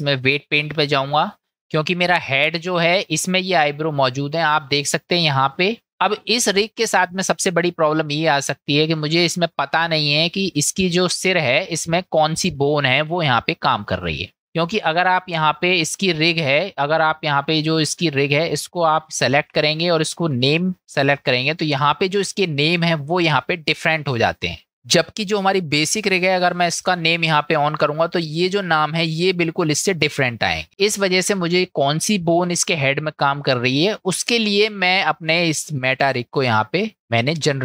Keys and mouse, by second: 4.8 shift+middle click, 5.6 middle click, 16.9 click, 18.2 click, 20.5 click, 26.8 click.